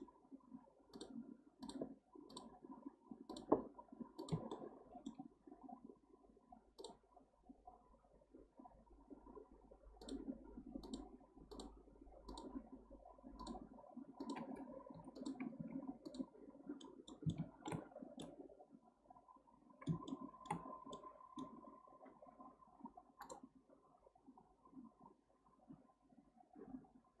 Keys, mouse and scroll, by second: 4.5-7.6 shift+middle drag, 14.9 2, 15.1 click, 15.6 x, 16.5-16.8 scroll down 1, 16.8-17.9 middle drag, 17.9 scroll down 1, 18.2-27.2 middle drag.